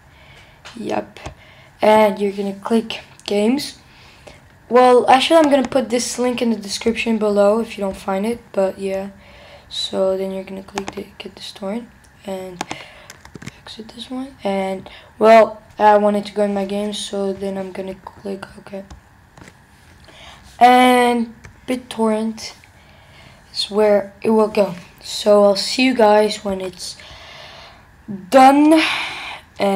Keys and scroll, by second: 13.3 super+w, 21.6 alt+Left.